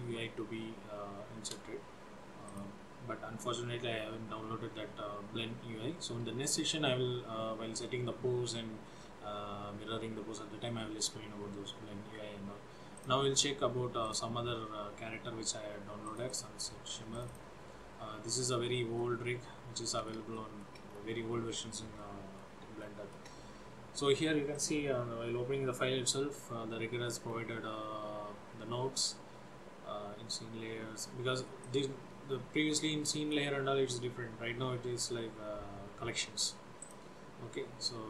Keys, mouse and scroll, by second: 2.5 click, 16.1 click, 16.4 click, 17.2 click.